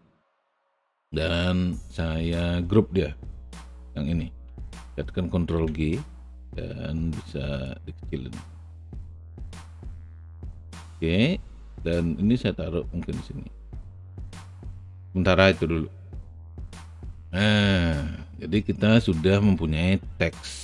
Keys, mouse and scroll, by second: 1.1 r, 7.6-10.3 drag, 10.3 w, 12.4-16.1 drag, 16.5 click.